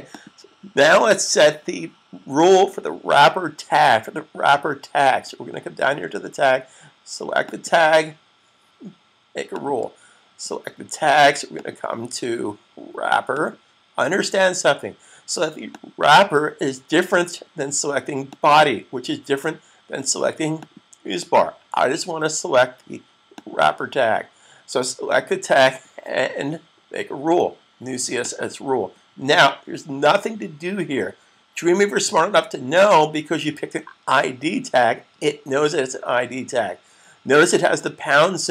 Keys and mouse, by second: 7.3 click, 23.2 click, 28.0 click.